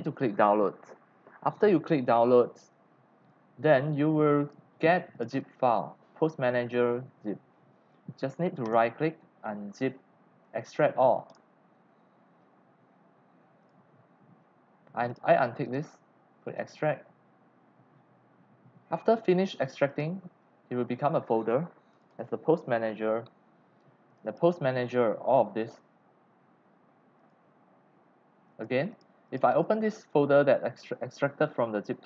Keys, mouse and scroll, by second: 2.7 click, 4.4 click, 8.6 right click, 11.3 click, 12.0-12.6 scroll down 1, 13.0 scroll down 1, 13.6 click, 15.1 click, 15.6 click, 16.6 click, 17.7 click, 19.4 click, 19.8 click, 21.9 click, 22.1 click, 24.1 click, 24.7 click, 25.3 click, 25.6 middle click, 27.2 click, 28.5 click, 28.9 click, 29.2 click, 30.1 click, 30.8 click.